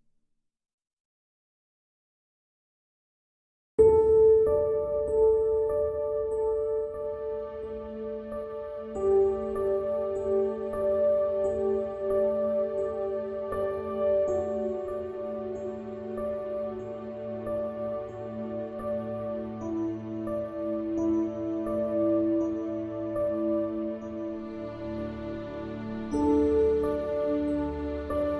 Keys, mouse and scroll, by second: 1.2 middle click, 9.6 middle click, 9.6-10.0 scroll up 1, 10.8 middle click, 10.8 scroll up 1, 11.5 middle click, 11.7-16.3 drag, 17.6-19.8 middle drag, 20.0-23.5 middle drag, 23.2 ctrl+z, 24.8-26.6 middle drag.